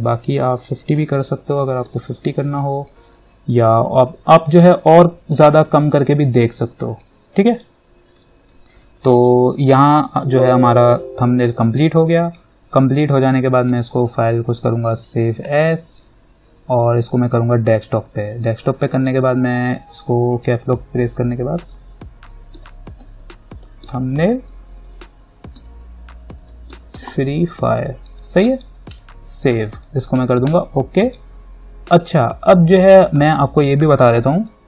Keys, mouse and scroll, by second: 0.9 click, 1.7-2.1 typing, 3.2 click, 5.3-6.1 typing, 7.0 click, 9.2 click, 9.9 ctrl+=, 13.9 click, 18.2 click, 20.7 Caps_Lock, 21.5-23.9 typing, 25.7-28.5 typing, 29.1 click.